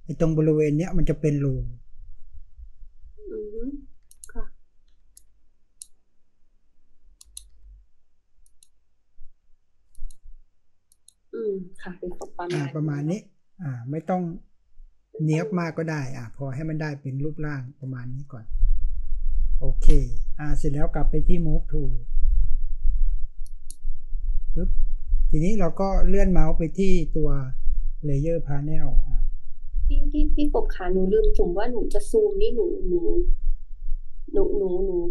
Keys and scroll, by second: 4.0-5.1 typing, 7.0-7.8 typing, 9.8 typing, 15.7 ctrl+space, 16.1 ctrl+space.